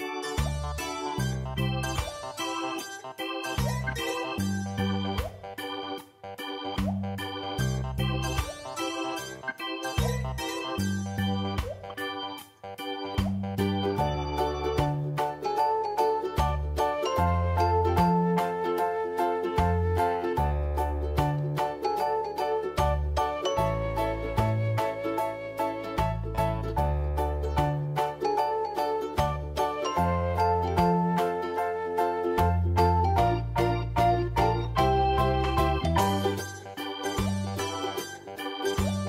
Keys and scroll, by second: 0.1 ctrl+space, 7.9 ctrl+t, 10.0 v, 13.0 v, 15.4 ctrl+], 17.1 typing, 19.7 space, 21.0 v, 25.3 ctrl+shift+z, 34.3 ctrl+g, 37.3 Tab.